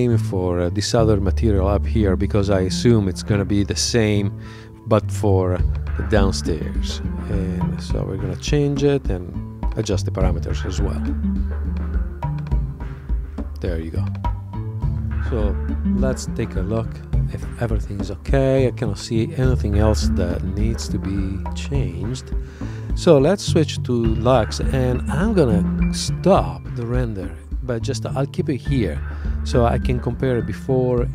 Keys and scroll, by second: 22.5 super+Tab.